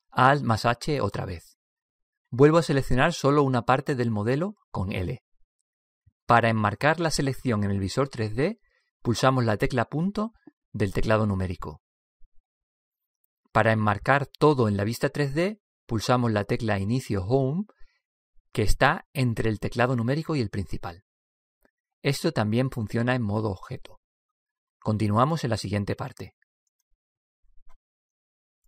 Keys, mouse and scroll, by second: 1.7 alt+h, 3.9 a, 5.7 l, 11.3 KP_Decimal, 18.3 Home.